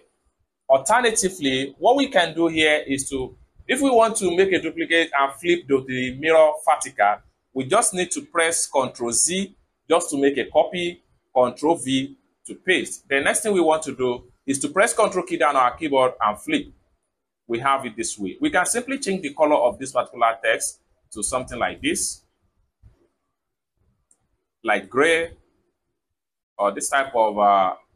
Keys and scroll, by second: 8.5 ctrl+c, 11.1 ctrl+v.